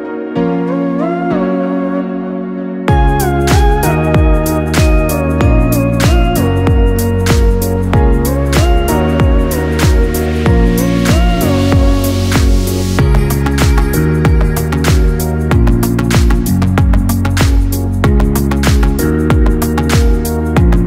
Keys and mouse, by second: 1.0 shift+d, 5.9-11.8 ctrl+middle drag, 11.8 g, 14.5-16.3 middle drag, 16.3 r.